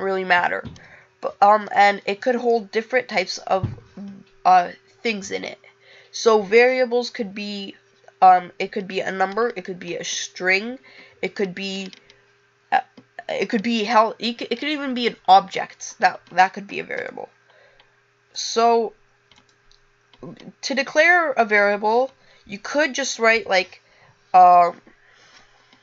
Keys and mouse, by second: 1.1 click.